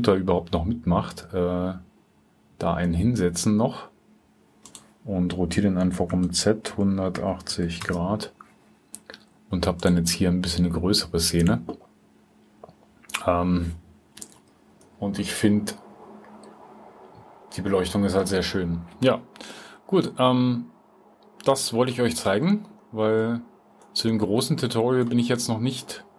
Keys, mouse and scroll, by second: 6.6-8.0 drag, 9.7-10.8 drag, 14.2-17.3 drag.